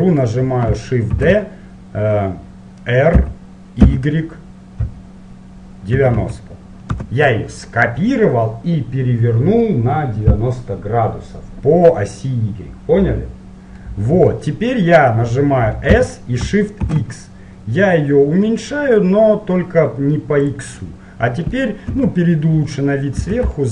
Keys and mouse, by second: 1.3 middle click, 1.4 shift+d, 14.0-15.8 middle drag, 16.0 s, 21.0-22.8 middle drag, 22.1 KP_7, 23.3 z.